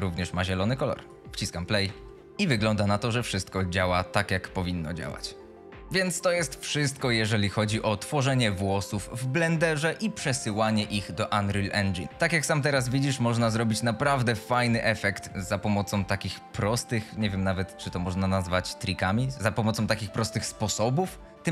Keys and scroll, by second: 0.0-0.6 typing, 2.1 w, 2.4 a, 8.1 d.